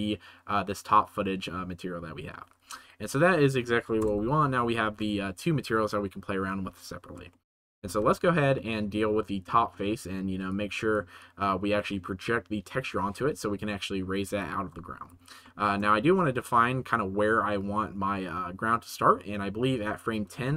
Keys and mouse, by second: 2.5 ctrl+z, 3.0 click, 3.4 middle click, 4.0 KP_0, 4.8 ctrl+s, 7.5 middle click, 7.9 ctrl+s, 8.5 middle click, 10.4 click, 11.1-11.7 drag, 14.4 click, 14.8 middle click, 15.4 shift+middle click, 16.0 ctrl+s, 18.2-20.0 drag, 20.4 ctrl+s.